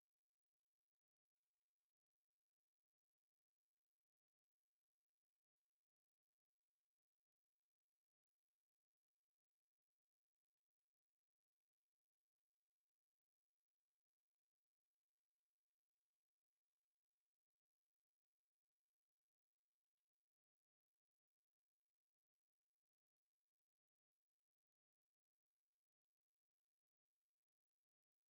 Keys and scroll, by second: 2.3 6, 2.6 e, 2.7 space, 3.0 Escape, 3.9-6.8 typing, 4.3 Escape, 4.6 Escape, 5.0 Escape, 6.5 Escape, 8.8-10.1 typing, 10.6 Escape, 14.7 Escape, 14.9 c, 15.2 space, 17.4 F8, 19.3 Escape, 19.9 r, 20.1 o, 21.2 m, 21.2 space, 24.1 c, 24.4 space, 25.8 Escape, 26.5 Escape, 26.9 c, 27.3 space, 28.1 Escape.